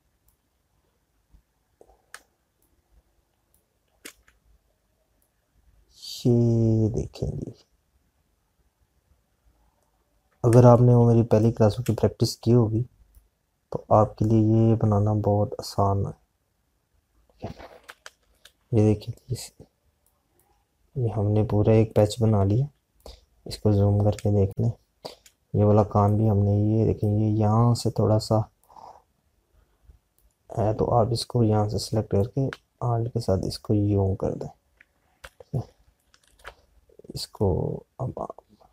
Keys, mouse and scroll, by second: 2.0 click, 8.8 alt+click, 12.9 space, 16.5 click, 23.7 z, 24.2 click.